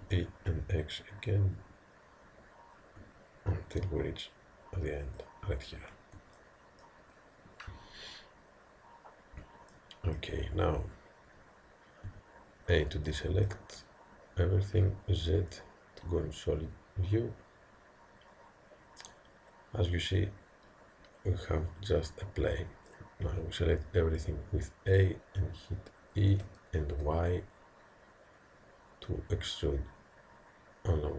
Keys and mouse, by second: 0.1 e, 6.4-12.1 middle drag, 12.1 a, 13.1-18.3 middle drag, 14.7 z, 23.3 a, 24.2-26.4 middle drag, 26.4 e.